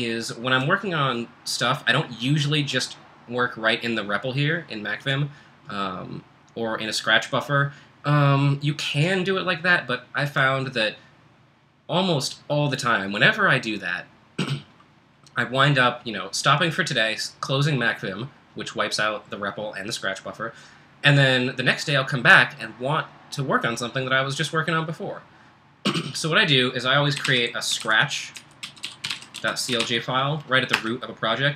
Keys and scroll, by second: 26.9-30.7 typing.